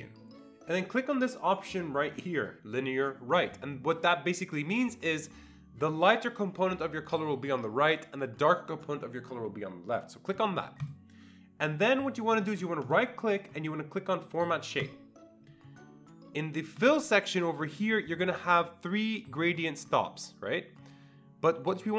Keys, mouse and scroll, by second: 10.8 click, 12.8 right click, 14.8 click, 16.8 click.